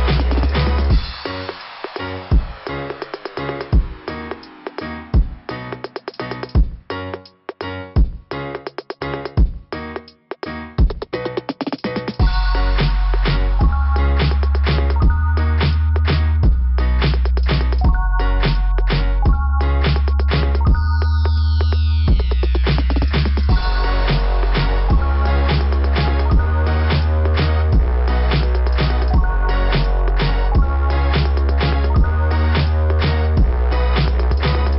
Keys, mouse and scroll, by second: 1.4 scroll up 1, 1.6 scroll down 2, 1.7 scroll up 1, 1.9 scroll down 1, 3.9 click, 4.1 click, 4.7 scroll up 2, 7.5 scroll down 2, 9.1 scroll down 2, 10.6 click, 10.7 click, 10.7 scroll down 1, 11.7 click, 11.8 click, 13.5 click, 17.1 click, 18.2 click, 18.3 click, 18.9 scroll up 2, 22.2 scroll down 1, 23.1 click, 24.2 click, 24.8 click, 26.2 click, 27.1 click, 28.2 click, 28.3 click, 32.4 scroll up 2.